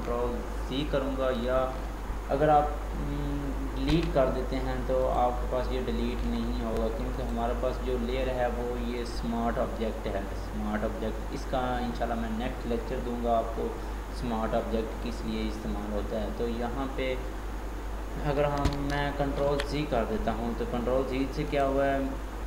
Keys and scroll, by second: 19.3 ctrl+j.